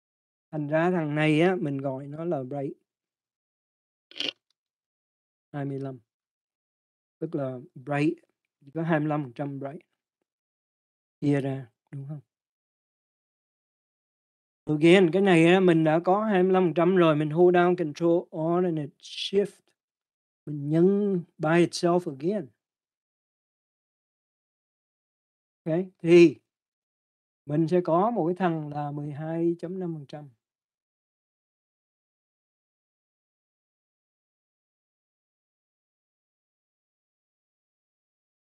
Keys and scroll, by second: 5.3-8.1 typing, 15.1 Return.